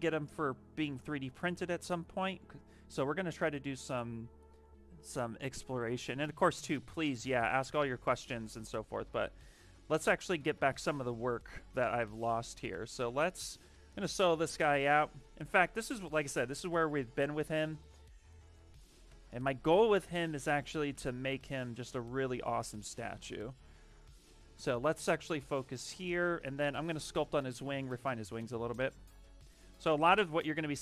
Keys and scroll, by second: 2.1 s, 8.5-9.9 typing, 19.0 shift+s.